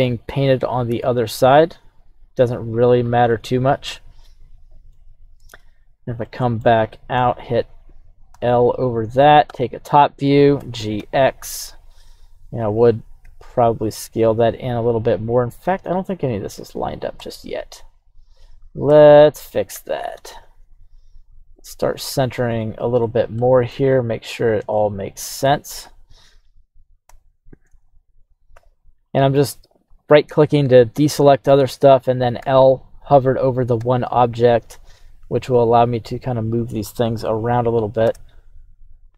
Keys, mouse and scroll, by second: 0.5 e, 2.9 click, 3.3-4.9 middle drag, 5.5 z, 6.2 middle click, 6.2 scroll down 1, 8.3 l, 9.1 middle click, 9.4 KP_7, 10.5 g, 11.0 x, 12.6 click, 13.2 g, 13.4 x, 15.2 right click, 17.1 l, 17.8 right click, 18.8 l, 19.7 g, 20.1 x, 22.2 click, 23.0 middle click, 23.9 scroll up 4, 24.3-24.7 scroll down 3, 24.7 middle click, 25.5 scroll up 1, 25.8 KP_7, 27.0 l, 27.8 right click, 28.5 l, 29.0 right click, 32.4 l, 33.8 g, 35.5 x, 37.2 click, 38.0 space.